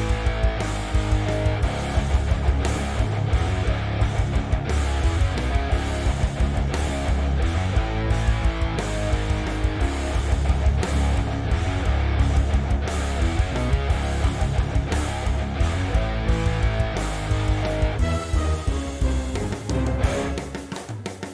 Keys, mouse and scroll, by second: 1.0 click, 1.1 g, 3.5 g, 5.8 ctrl+click, 6.4 click, 7.1 shift+click, 7.8 shift+click, 8.0 f, 8.4 click, 9.0 f, 9.3 click, 9.5-9.9 scroll down 1, 9.9-11.8 shift+middle drag, 10.2 scroll down 1, 11.8 click, 12.2 click, 12.7-13.0 scroll up 1, 13.0 shift+drag, 13.4 shift+click, 14.9 shift+click, 15.5 shift+click, 16.1 shift+click, 16.5-17.9 shift+middle drag, 16.9 scroll down 2, 17.5-17.9 scroll up 2, 17.9 shift+drag, 18.4 shift+click, 19.0 shift+click, 19.5-21.3 right drag, 19.8 Escape, 20.0 x.